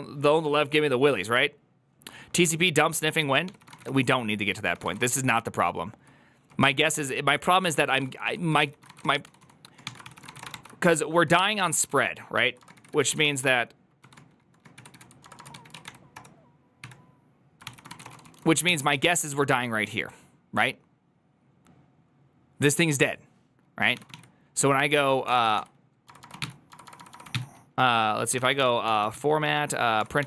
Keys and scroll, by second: 3.3 alt+{, 3.3 ctrl+c, 3.3-19.0 typing, 11.0 ctrl+u, 11.5 ctrl+u, 25.3 ctrl+c, 25.3-30.2 typing, 29.9 Tab.